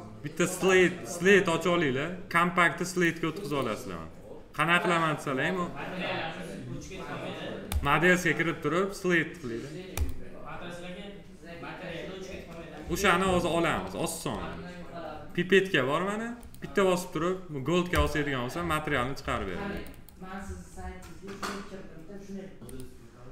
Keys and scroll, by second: 14.2 F4.